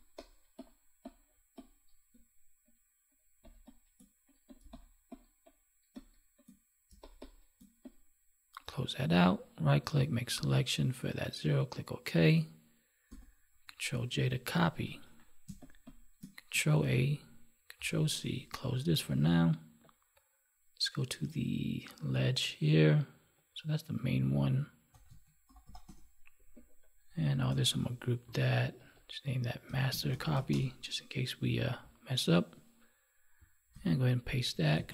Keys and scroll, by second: 3.4 space, 13.0 ctrl+j, 15.0 ctrl+1, 18.2 ctrl+Tab, 28.2 ctrl+g, 33.7 ctrl+v.